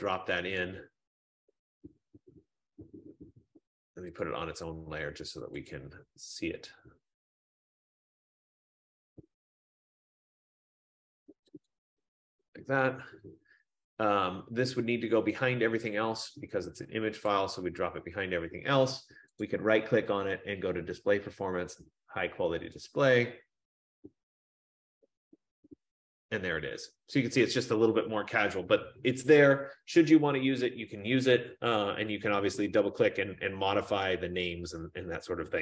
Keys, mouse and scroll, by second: 4.4 click, 5.8 click, 10.2 F15, 12.0-16.6 drag, 17.3 click, 19.6 right click, 23.0 click.